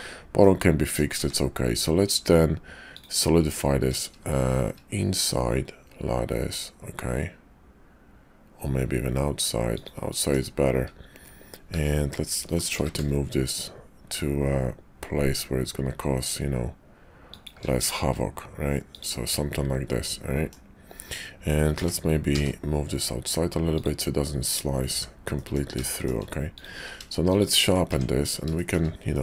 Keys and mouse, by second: 0.4 middle click, 1.2 q, 10.1 click, 11.6 `, 12.6 g, 18.8 click, 20.0 middle click, 21.8 g, 24.9 h, 25.3 middle click, 25.9 shift+click, 26.5 click, 26.7 q, 27.9 Tab, 28.6 shift+middle click, 29.1 middle click.